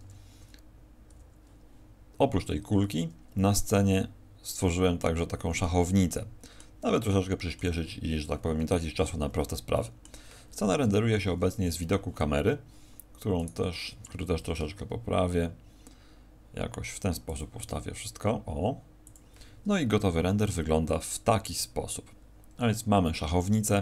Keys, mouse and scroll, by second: 1.1 t, 3.6 middle click, 4.9 middle click, 6.1 middle click, 6.9 middle click, 8.6-9.0 scroll down 6, 9.7 middle click, 10.7 KP_0, 13.3 right click, 14.3 shift+f, 17.3 click, 17.5 g, 19.1 click.